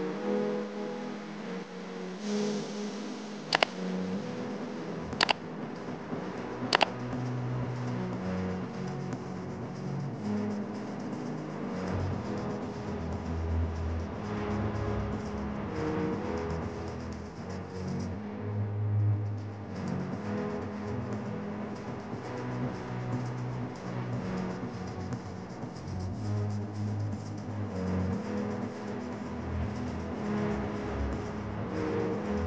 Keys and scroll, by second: 2.1 space, 15.9 ctrl+d, 17.6 shift+j, 27.1 shift+F5, 27.7 Return, 29.0 ctrl+d, 30.8 space.